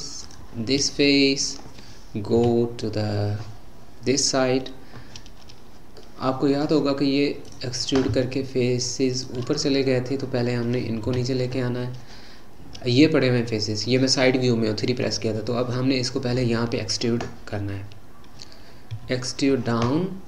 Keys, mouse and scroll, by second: 0.2 shift+click, 0.9-2.4 middle drag, 2.4 KP_3, 6.0-7.4 middle drag, 7.4 click, 9.1 shift+click, 11.1 KP_3, 18.9 e.